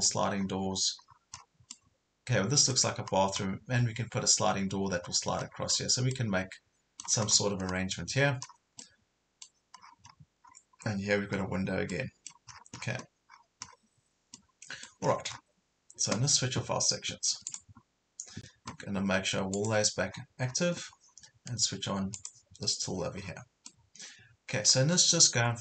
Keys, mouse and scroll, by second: 0.4 scroll up 1, 1.1 scroll down 1, 1.6 scroll down 1, 1.7 middle click, 3.0 scroll up 1, 5.1 scroll down 1, 6.1-7.1 middle drag, 7.7 scroll up 1, 8.2 scroll down 1, 8.8 middle click, 9.8 scroll down 1, 10.4 scroll up 1, 11.6 scroll down 1, 11.9 middle click, 12.5 scroll down 1, 13.3 scroll up 1, 14.3 middle click, 15.1 scroll down 1, 17.5 click, 20.2 scroll up 1, 22.2 click, 23.3 scroll down 1, 23.7 middle click, 25.4 scroll up 1.